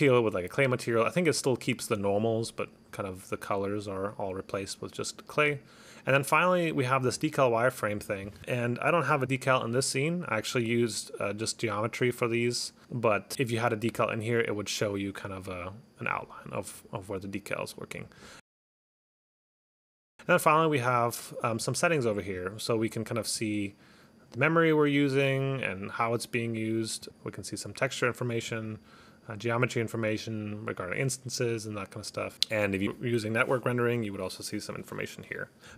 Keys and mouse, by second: 5.6 click, 7.2 click, 8.0 click, 13.3 click, 18.0 click, 20.2 click, 20.4 click, 21.7 click, 22.1 click, 22.9 click, 23.3 click, 27.1 click, 28.5 click, 32.3 click, 35.6 click.